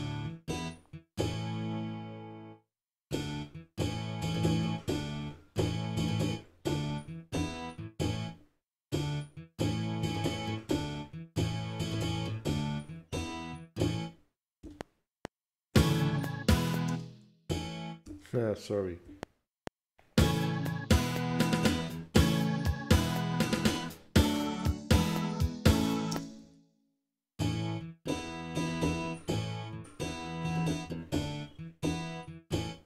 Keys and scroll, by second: 14.6 F7, 16.9 space, 19.0 F7, 26.1 space, 26.4 z.